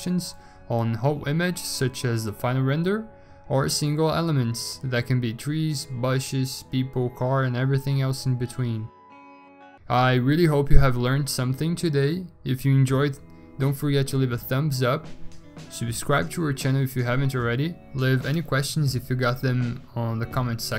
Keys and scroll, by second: 0.0-1.2 typing.